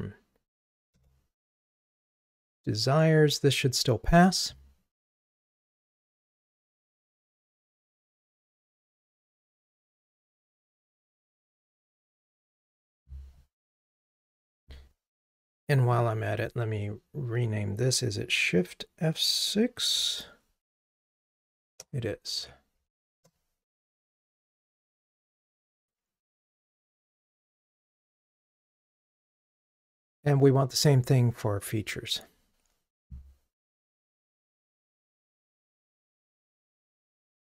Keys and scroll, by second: 1.0 Return, 2.3 ctrl+r, 21.1 shift+F6, 24.8 ctrl+r.